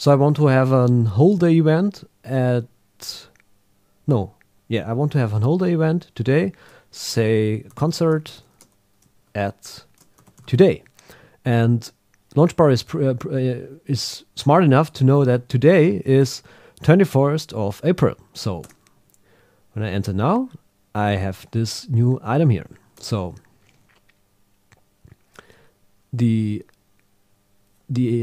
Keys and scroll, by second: 7.7 shift+c, 9.2 shift+@, 15.5 alt+shift+Left, 16.1 Right, 18.6 Return.